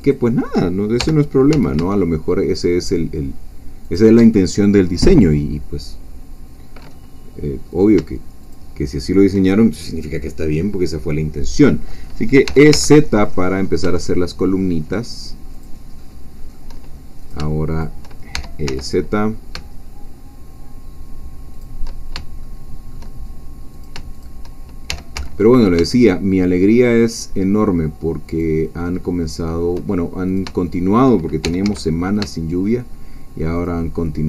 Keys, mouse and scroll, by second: 0.1 shift+click, 1.0 shift+g, 1.5 z, 3.9 shift+click, 4.8-7.7 middle drag, 4.8-7.7 scroll down 2, 7.7 click, 8.5 shift+click, 12.4 e, 12.7 z, 15.5 shift+click, 16.0-17.3 shift+middle drag, 17.2 scroll down 2, 17.3 shift+click, 18.3 shift+e, 18.7 shift+z, 21.6 shift+click, 22.4-23.5 shift+middle drag, 23.8 shift+click, 24.9 shift+e, 25.1 z, 28.3 shift+click, 29.0 shift+middle click, 30.3 shift+click, 30.7 shift+click, 31.4 shift+e, 31.6 shift+z, 33.6 shift+click, 34.0 shift+middle click.